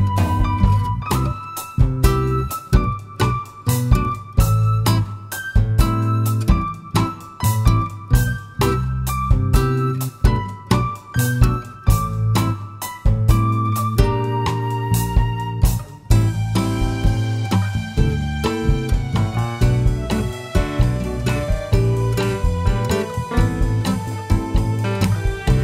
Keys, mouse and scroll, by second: 0.7 scroll down 2, 0.9-2.3 middle drag, 2.3 click, 2.8-3.2 scroll down 2, 3.2-4.3 middle drag, 4.3 scroll down 1, 5.2 click, 7.3 click, 8.4 click, 10.3 alt+r, 11.6-18.0 middle drag, 13.8 r, 18.0 KP_Enter, 18.8 scroll down 1, 21.4 r.